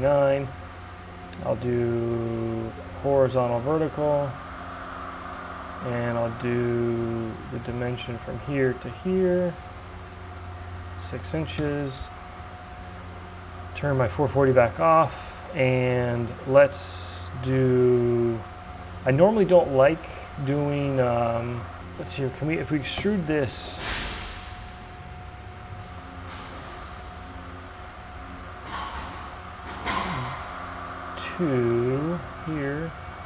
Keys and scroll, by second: 6.0 d, 11.0 Return, 22.6 e.